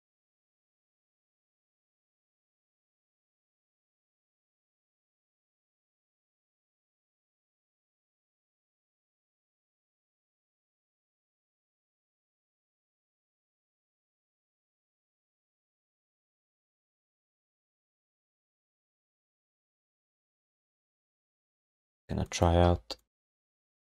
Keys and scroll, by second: 1.8 q, 2.5 alt+shift+d, 3.0 3, 7.0 1, 8.2 alt+d, 8.4 ctrl+s, 8.7 f, 16.1 r, 18.7 f, 21.4 w, 22.6 r.